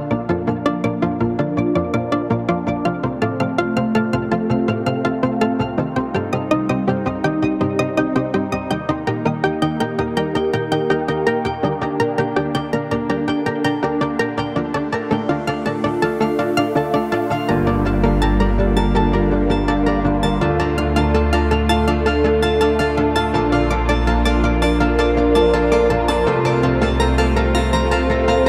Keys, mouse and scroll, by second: 0.0-1.0 typing, 2.2 scroll up 1, 3.1 shift+click, 3.6 ctrl+z, 3.9 shift+click, 4.7 typing, 5.9 ctrl+space, 6.2 click, 7.1 click, 7.1 typing, 9.9 click, 10.3 ctrl+z, 10.5 ctrl+click, 10.8 space, 11.4-13.2 drag, 13.2 shift+Up, 13.5 shift+Right, 13.6 space, 14.3 click, 14.7 shift+Up, 14.9 shift+Left, 15.1 space, 15.2 ctrl+click, 15.7-17.0 ctrl+drag, 17.0 ctrl+click, 18.7 shift+Up, 19.6-20.1 typing, 19.8 click, 21.0 shift+click, 21.7 Down, 22.5 click, 23.4 click, 23.4 typing, 24.8 shift+click, 25.1 shift+Left, 25.4 shift+Down, 25.8 ctrl+space, 26.1 click, 26.6 typing, 26.7 click, 27.1 shift+Down, 27.4 shift+Right, 27.7 Left, 28.1 click, 28.3 ctrl+space, 28.4 ctrl+click.